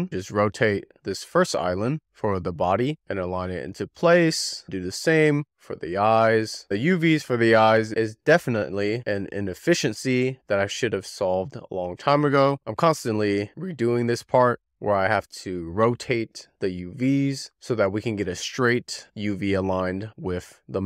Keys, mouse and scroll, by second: 0.1 click, 0.6 shift+middle click, 0.8 scroll up 1, 1.2 click, 2.0 click, 2.1 click, 2.6 click, 2.7 w, 2.8 click, 3.5 r, 3.7 click, 4.5 Tab, 4.6 r, 4.8 w, 4.9 click, 5.2 Tab, 5.3 click, 5.4 scroll down 1, 6.0 shift+middle click, 6.2 scroll up 4, 6.2 click, 7.1 click, 7.4 click, 7.4 click, 7.6 click, 7.8 a, 8.0 scroll down 2, 8.1 click, 8.3 scroll up 2, 8.4 a, 8.5 click, 8.7 click, 8.8 a, 9.0 click, 9.0 click, 9.4 shift+middle click, 9.6 click, 10.5 click, 11.5 scroll up 6, 11.7 click, 11.8 click, 12.6 click, 12.7 click, 12.8 click, 12.9 z, 13.0 click, 13.4 click, 13.7 e, 13.9 click, 14.5 w, 14.7 Left, 14.9 Left, 15.0 Left, 15.1 Left, 15.3 Left, 15.5 Left, 15.6 Left, 15.8 Left, 16.7 click, 17.5 click, 18.1 scroll up 1, 18.2 middle click, 18.3 scroll down 8, 18.5-19.2 scroll up 2, 18.7 middle click, 19.2 middle click, 19.4 click, 19.6 click, 20.0 click, 20.2 a, 20.3 a, 20.5 e, 20.5 click.